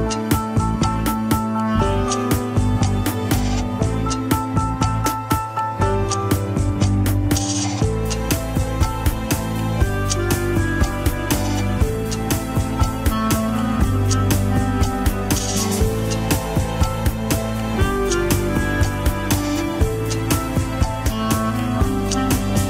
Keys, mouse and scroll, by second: 0.3 scroll down 3, 0.6 g, 2.8 click, 3.7 g, 7.5-8.2 scroll up 3, 8.2 r, 10.2 ctrl+Tab, 10.4 shift+click, 10.7 ctrl+Tab, 11.7 alt+z, 12.7 ctrl+click, 13.8 alt+z, 14.2-15.7 shift+middle drag, 15.7-17.0 drag, 17.0-17.7 scroll up 1, 17.7 alt+z, 18.6 ctrl+click, 20.3 ctrl+click, 21.2 ctrl+click.